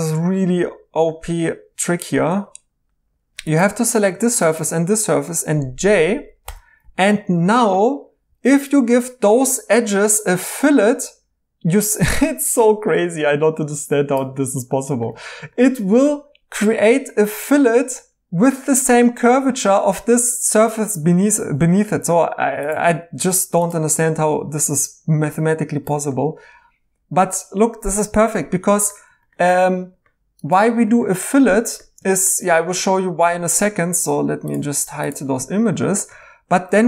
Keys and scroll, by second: 2.3 Tab, 6.4 j, 8.2 2, 21.5 ctrl+z, 23.3 2, 36.6 2.